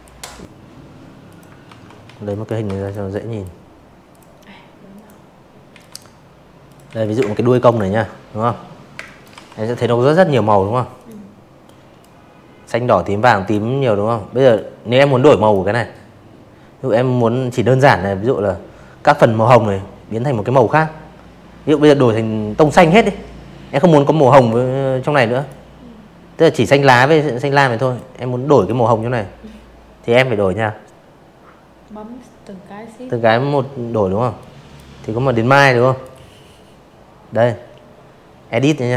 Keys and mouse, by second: 0.4-38.9 drag.